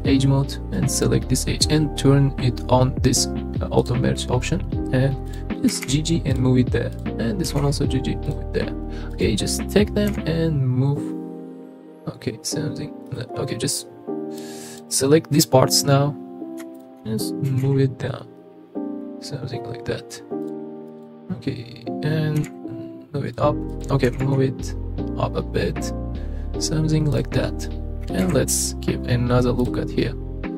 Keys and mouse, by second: 0.8 click, 3.8 click, 5.3 click, 5.7 g, 5.8 g, 6.9 click, 7.5 g, 7.6 g, 8.2 click, 9.1 click, 10.1 g, 14.4 click, 16.8 shift+click, 17.5 g, 17.6 z, 20.4 click, 21.0 click, 22.4 g, 22.5 z, 23.3 click, 23.8 click, 24.1 g, 24.2 z, 28.2 ctrl+r, 29.6 click.